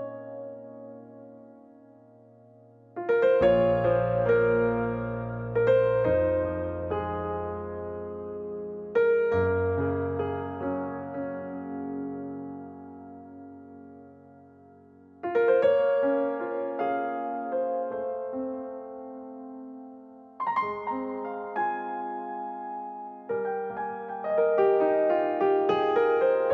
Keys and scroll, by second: 12.4-14.0 typing, 15.1 Return, 16.5 space.